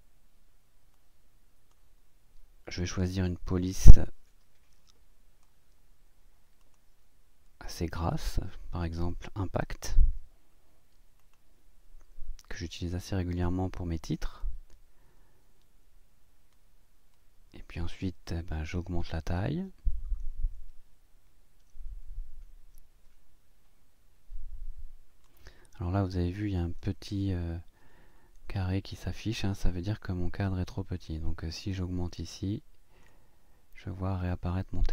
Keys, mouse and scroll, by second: 1.0 click, 4.0-5.6 drag, 6.6 click, 8.1 click, 9.6 i, 11.2 click, 14.4 click, 27.4 ctrl+scroll up 1, 28.1-28.5 ctrl+scroll up 1, 29.9-31.2 drag, 32.1 click.